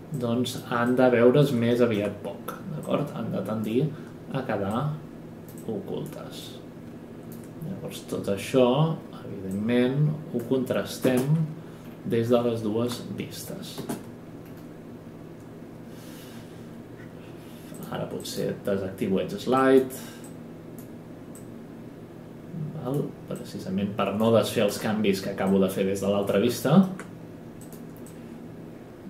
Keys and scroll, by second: 11.0 space.